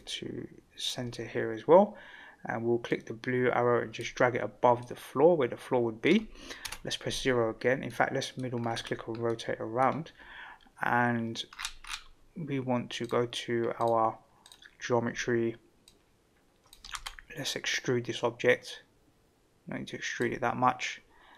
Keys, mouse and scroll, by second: 2.9-4.0 drag, 4.8-6.1 middle drag, 6.6 KP_0, 7.9-8.4 middle drag, 8.6-9.0 scroll up 3, 9.2-9.8 middle drag, 11.5-11.9 scroll up 4, 13.0 click, 13.7 click, 14.4 drag, 15.9 click, 16.9 ctrl+z, 17.5-20.2 drag.